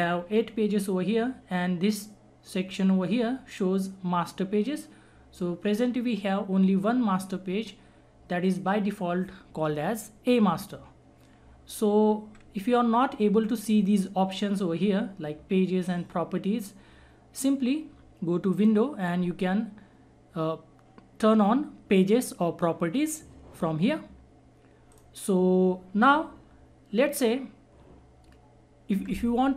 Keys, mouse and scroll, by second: 18.5 click, 24.9 click, 27.6-29.4 scroll up 1.